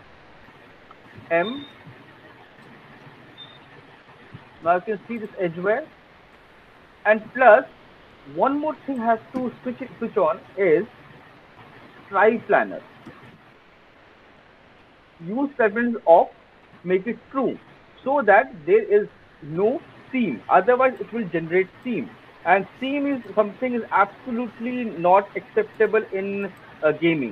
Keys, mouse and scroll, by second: 0.2 alt+click, 2.1 alt+click, 2.5 alt+middle click, 3.2 alt+middle click, 3.6 alt+click, 3.8 alt+middle click, 4.8 alt+middle click, 6.9 alt+click, 6.9-7.6 alt+scroll, 7.4 alt+middle click, 7.6 alt+middle click, 7.9 alt+click, 7.9-8.3 alt+scroll, 10.2 middle click, 10.8-12.1 scroll, 12.1 click, 16.3 click, 18.7 alt+right click, 19.1 alt+right click, 19.5 alt+right click, 20.3 alt+click.